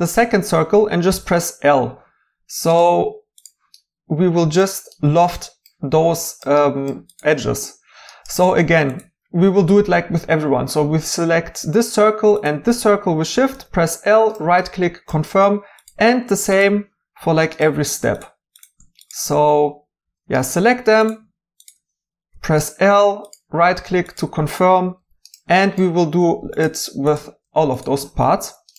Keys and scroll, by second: 13.5 i, 17.1 i, 20.0 i, 22.3 i, 25.0 i.